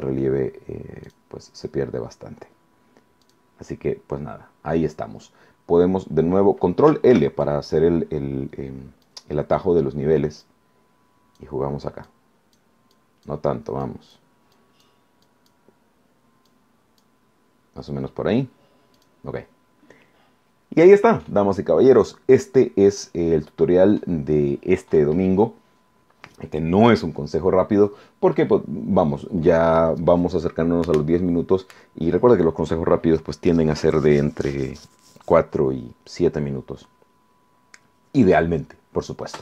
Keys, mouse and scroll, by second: 1.0 click, 3.2 click, 7.1 ctrl+l, 9.0-9.8 drag, 10.4-11.6 drag, 12.0 click, 13.0-13.4 drag, 13.8 click, 14.6 click, 15.2 click, 16.5-17.2 drag, 19.0 click.